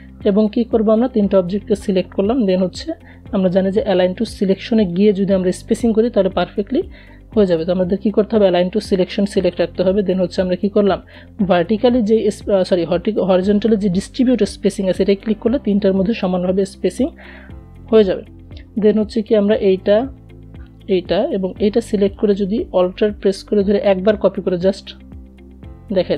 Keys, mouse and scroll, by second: 7.7 click, 13.2 click, 17.8 click, 19.1 shift+click, 22.9-26.1 alt+drag.